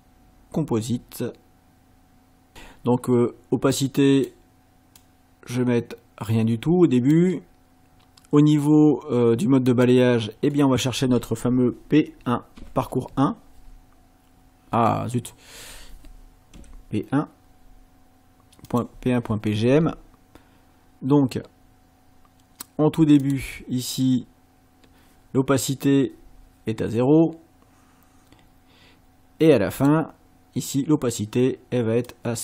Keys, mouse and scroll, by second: 3.7 click, 5.0-7.3 drag, 9.7 click, 12.6 p, 15.1 scroll up 2, 16.5 p, 18.7 click, 23.2 click, 29.8 click, 32.1-32.4 drag.